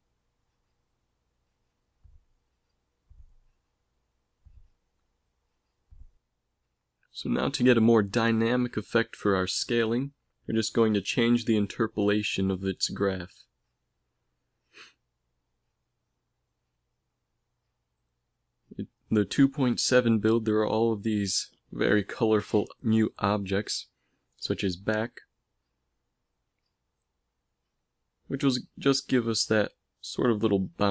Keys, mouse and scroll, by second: 4.5-6.5 drag, 6.0 KP_7, 12.9 middle click, 17.8 a, 18.2 a, 19.5 t, 26.1 shift+Left, 29.3 click, 29.5 alt+a, 30.7 alt+a.